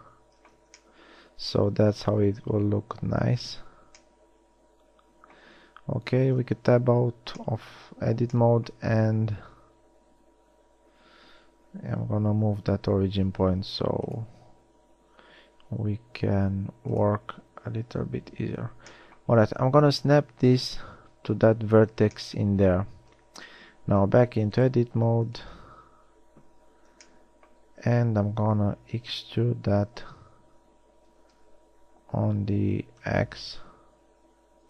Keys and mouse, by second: 0.7 z, 3.1 KP_1, 5.7 a, 6.5 Tab, 12.1 t, 18.1 t, 23.3 Tab, 25.8 KP_1, 29.7 e.